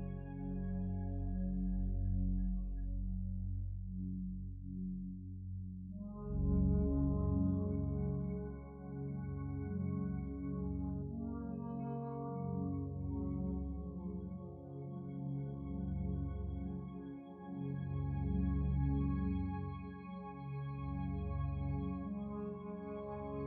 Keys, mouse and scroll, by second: 22.6 ctrl+7.